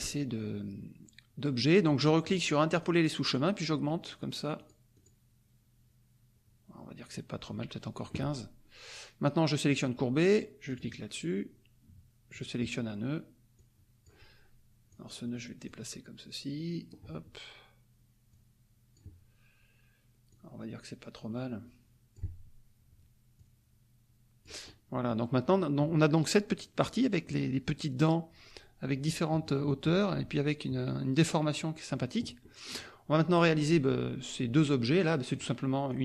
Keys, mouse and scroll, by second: 2.7 click, 4.0 click, 4.5 click, 4.9 click, 7.9 click, 9.8 click, 10.6 click, 12.3 click, 13.5 click, 14.9 click, 15.6-17.0 drag, 18.3 click, 20.3-22.3 drag, 23.4-24.6 drag, 24.6 middle click, 32.4 middle click, 35.3 click, 35.9-36.0 drag.